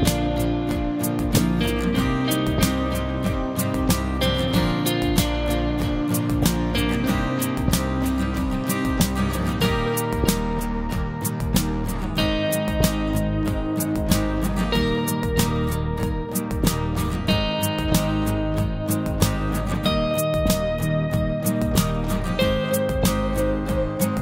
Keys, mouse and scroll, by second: 1.0 scroll down 1, 1.8 typing, 9.6 scroll up 1, 14.0 scroll down 1, 15.2 typing, 16.5-16.8 typing, 16.6 scroll down 1, 20.0 typing.